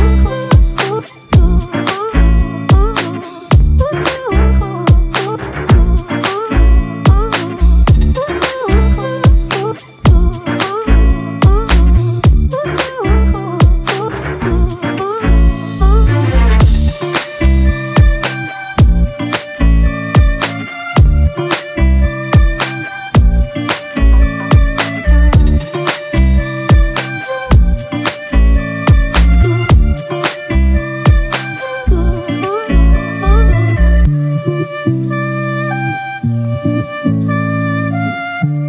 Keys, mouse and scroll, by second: 17.9 ctrl+t, 23.8 Return, 25.7-26.2 alt+scroll up 3, 27.0-29.4 alt+drag, 29.4-32.0 scroll up 1.